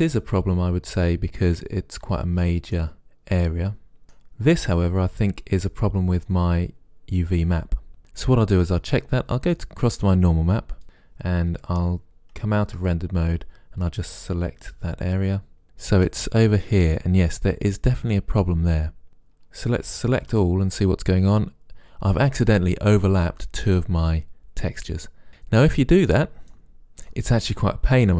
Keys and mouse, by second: 0.7-2.5 middle drag, 3.9 middle click, 9.4-10.8 middle drag, 12.7 shift+z, 15.6 a, 15.6 c, 16.1-18.1 drag, 20.2 a, 20.4 a.